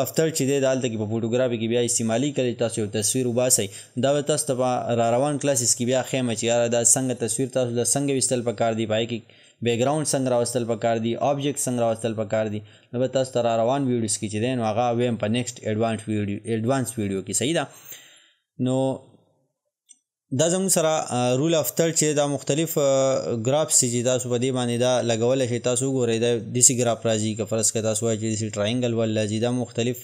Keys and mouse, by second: 20.4-27.1 drag.